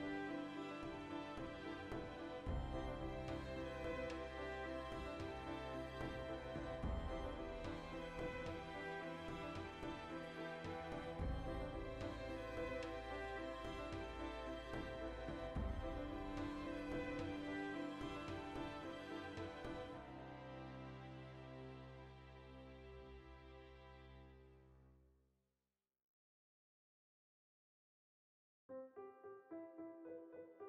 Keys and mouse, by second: 0.3 shift+middle click, 1.0-2.6 right drag, 2.6 z, 2.9-3.7 shift+right drag, 3.7 z, 4.8-6.3 shift+middle drag, 5.4 ctrl+r, 6.3 click, 6.5-8.3 shift+middle drag, 6.9 ctrl+r, 8.3 click, 8.5 ctrl+middle click, 8.9 1, 9.1 right click, 9.3 shift+right click, 9.7 ctrl+z, 10.1-11.3 shift+right drag, 11.3 m, 11.5 shift+right click, 12.1 shift+r, 12.4-14.0 shift+middle drag, 13.7 2, 14.0 right click, 14.3 f, 14.5 right click, 15.0 f, 15.2-17.3 shift+middle drag, 16.3 ctrl+r, 18.4 click, 19.1-21.3 shift+middle drag, 19.8 ctrl+r, 21.3 right click, 21.9-24.1 shift+middle drag, 23.8 ctrl+r, 24.1 right click, 24.7 ctrl+z, 24.9-26.4 shift+middle drag, 26.4 alt+right click, 26.7-30.6 middle drag, 27.1 ctrl+b.